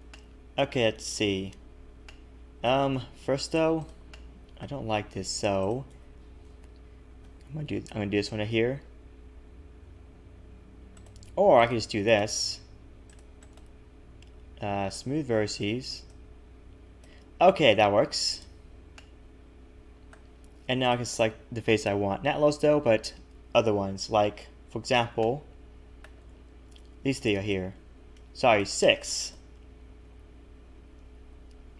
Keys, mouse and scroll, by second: 0.1 shift+middle click, 0.9-1.4 scroll up 1, 1.4 scroll up 1, 2.7 middle click, 2.9 a, 3.1 a, 3.8 click, 4.1 middle click, 5.6 shift+click, 6.4 KP_3, 7.2 s, 11.6 right click, 13.1 click, 13.4 right click, 16.1 click, 19.0 middle click, 20.8 click, 21.6 KP_3, 22.7 a, 23.8 a, 25.2 shift+middle click, 27.0 c, 29.8 scroll down 1.